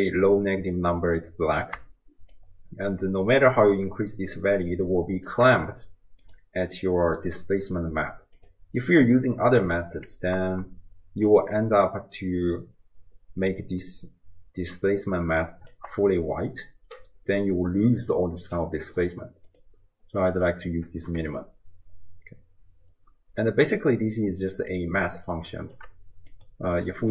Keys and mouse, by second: 2.4-5.3 shift+drag, 6.2 click, 8.4-10.0 drag, 11.3-15.7 shift+drag, 19.5-20.3 drag, 21.4-25.8 shift+drag, 26.4 click.